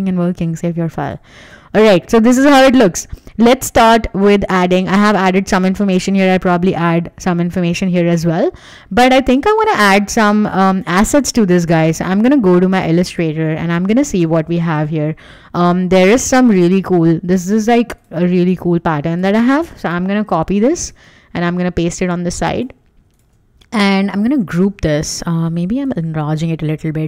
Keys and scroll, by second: 1.5 w, 5.5 w, 8.8 w, 20.0 super+c, 20.4 Escape, 21.1 super+v, 24.7 super+g.